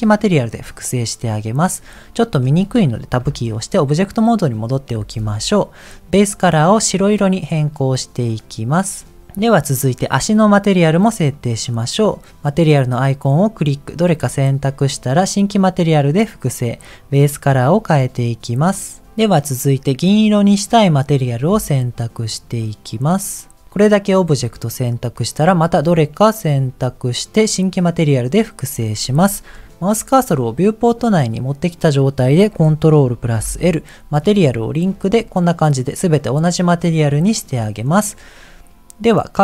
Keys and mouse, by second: 0.5 click, 3.3 Tab, 5.2 ctrl+s, 6.2 click, 11.4-14.3 drag, 15.4 click, 17.2 click, 21.7 shift+click, 25.5-26.5 drag, 27.9 click, 33.3 ctrl+l, 36.9 click.